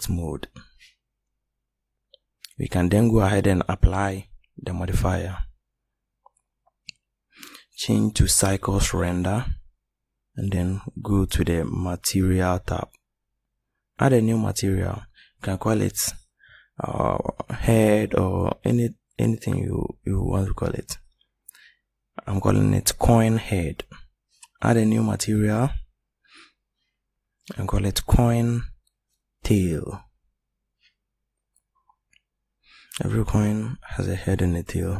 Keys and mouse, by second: 5.0-6.9 drag, 7.3-10.2 drag, 10.8-14.0 drag, 14.1-20.8 drag, 23.7 click, 31.7 Left, 31.9 Left.